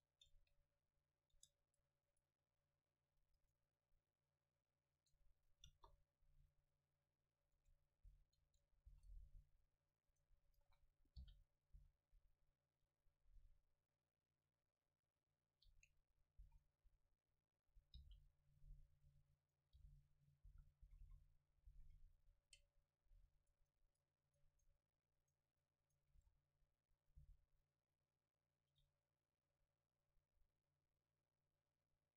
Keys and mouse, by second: 0.4 Tab, 0.6 click, 1.4 Tab, 1.7-3.8 right drag, 2.6-3.8 drag, 5.7 KP_0, 6.8-8.9 drag, 7.6 Tab, 8.1 a, 8.9 ctrl+s, 10.1-12.4 right drag, 11.3 g, 11.8 s, 12.4-14.5 drag, 16.5 s, 17.2-23.0 drag, 18.0 g, 19.5-21.7 right drag, 19.8 g, 20.5 a, 20.9 a, 21.1 a, 21.7 ctrl+s, 23.4-27.8 right drag, 26.2 s, 27.1-28.9 drag, 27.3 g, 29.1-31.8 drag.